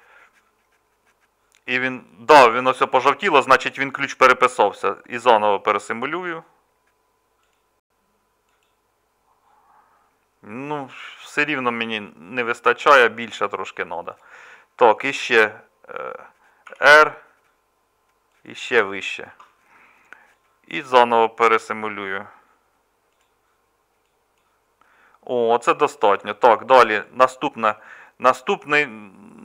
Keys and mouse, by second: 16.7 r, 27.1-29.4 middle drag.